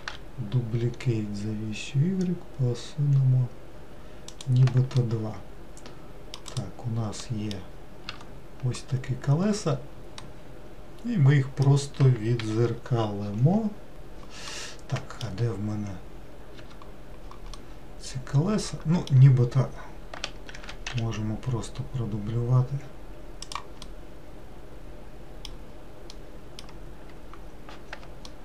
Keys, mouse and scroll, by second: 0.1 shift+d, 5.1-6.7 middle drag, 6.7 click, 7.4 middle click, 8.2 Tab, 10.3-12.5 middle drag, 12.5 n, 13.9 click, 14.0 click, 14.7-16.7 middle drag, 16.7 Tab, 17.8-20.7 middle drag, 20.7 shift+d, 24.0-28.4 middle drag.